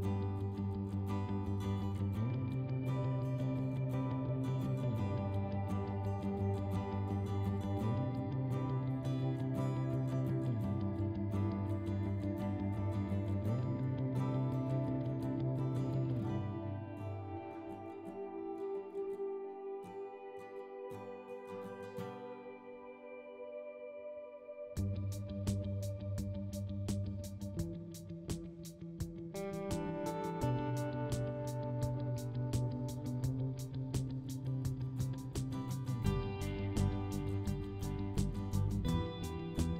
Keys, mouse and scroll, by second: 1.4-2.8 middle drag, 2.8 click, 5.0-7.1 middle drag, 7.1 click, 8.8-10.3 middle drag, 10.3 KP_0, 10.4 KP_0, 11.2-12.0 scroll up 11, 12.8 click, 15.4-15.7 scroll down 2, 16.5 click, 17.4 scroll down 3, 17.8-20.5 shift+middle drag, 20.5 click, 21.0 s, 22.8 click, 25.4 click, 26.8 click, 28.5-28.9 scroll up 3, 29.8 scroll up 2, 32.4 click, 37.0 click.